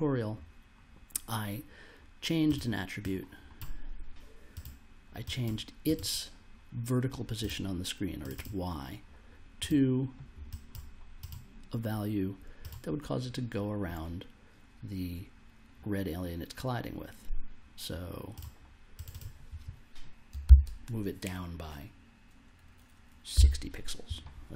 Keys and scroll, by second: 20.4 shift+=, 23.3 6, 24.4 0.